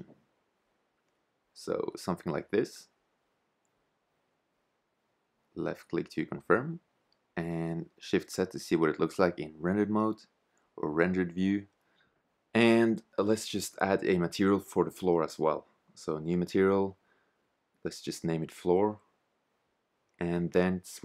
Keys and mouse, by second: 5.7 shift+z, 10.5-13.6 drag, 15.6 click, 17.9 o.